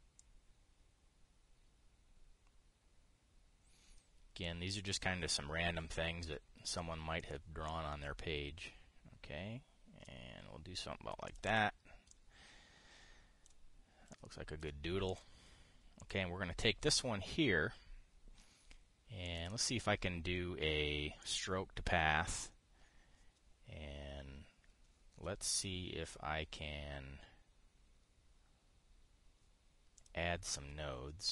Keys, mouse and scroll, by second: 0.9-5.2 drag, 5.6 click, 7.9 click, 8.3-10.8 drag, 11.9 click, 12.8-14.3 drag, 14.8 ctrl+click, 15.8 click, 16.7 click, 19.9 click, 21.9 click, 26.2 click, 30.7 click.